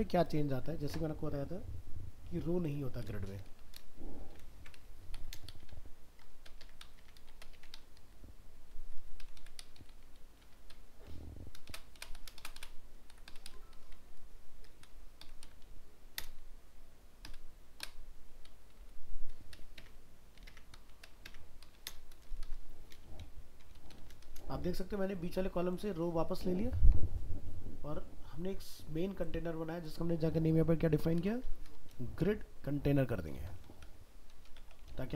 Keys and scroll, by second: 4.6 ctrl+x, 5.7 ctrl+v.